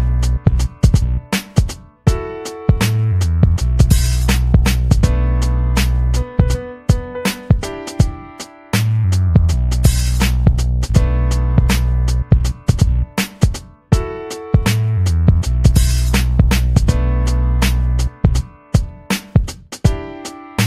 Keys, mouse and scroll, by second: 0.3 click, 0.9-2.9 scroll up 4, 2.9 click, 3.4-5.2 typing, 8.8 scroll down 2, 9.4 scroll down 2, 11.3 click, 11.9 scroll up 2, 12.3 click, 12.7 click, 13.4 scroll down 2, 14.0 click, 15.9 click, 18.0-18.4 ctrl+scroll down 4, 19.2-20.4 ctrl+scroll down 8, 20.5-20.6 ctrl+scroll down 8.